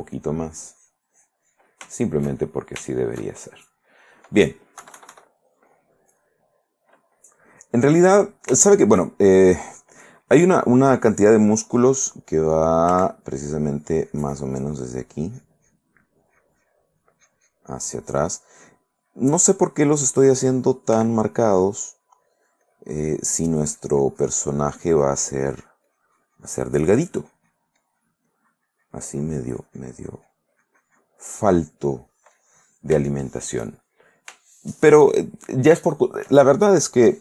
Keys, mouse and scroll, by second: 2.0 shift+middle click, 2.6 shift+middle click, 2.9 shift+right click, 3.6-4.6 shift+middle drag, 5.0 KP_Subtract, 5.6-7.6 middle drag, 8.0-9.2 middle drag, 9.4 shift+middle click, 13.1 f, 13.7 click, 14.1-16.2 drag, 16.3 click, 17.2 click, 18.2 click, 19.2-20.4 drag, 21.1 f, 21.5-30.7 drag, 32.2 middle click, 32.8 middle click, 33.7 shift+middle click, 34.0 shift+middle click, 34.7 shift+middle click, 35.5 shift+middle click, 36.1 shift+middle click, 36.9 shift+middle click.